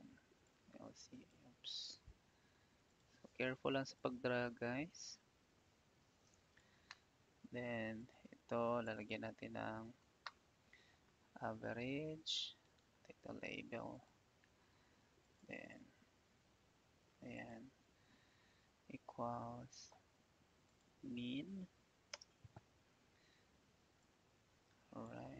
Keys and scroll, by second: 1.8 ctrl+z, 18.1 =, 22.1 Return.